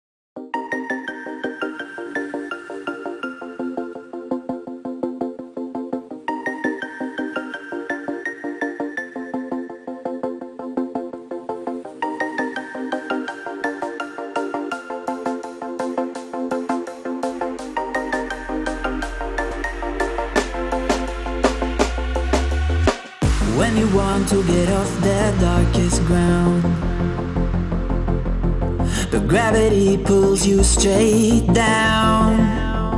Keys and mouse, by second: 2.4 click, 11.9 click, 18.8 space, 19.0-21.7 drag, 22.0 right click, 22.6-27.7 drag, 30.7 ctrl+=, 31.2 ctrl+-, 31.7 space, 31.9 click, 32.0 space, 32.4 click, 32.5-32.8 space.